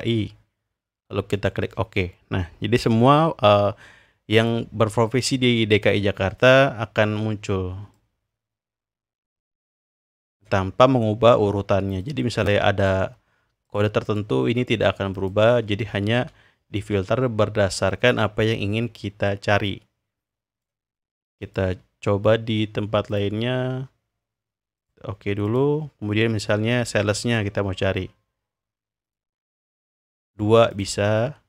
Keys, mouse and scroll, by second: 0.0 click, 1.3 click, 4.3 click, 8.0-10.4 drag, 12.0-12.9 drag, 13.7 drag, 14.1 click, 14.6 click, 15.2 click, 17.9-20.6 drag, 21.4 click, 23.1 click, 24.8 click, 25.4 click, 27.2 click, 29.0 click, 30.2-31.4 drag.